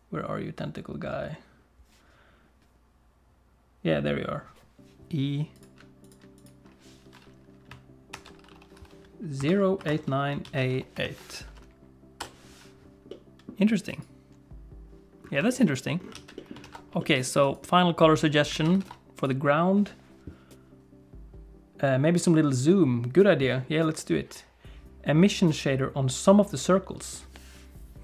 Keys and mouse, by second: 5.6 click, 13.2 middle click, 14.0 click, 15.5 shift+click, 15.7 middle click, 16.1 alt+a, 16.4 click, 16.7 ctrl+s, 17.0 shift+click, 17.5 click, 18.5 alt+a, 18.8 ctrl+s, 19.2 click.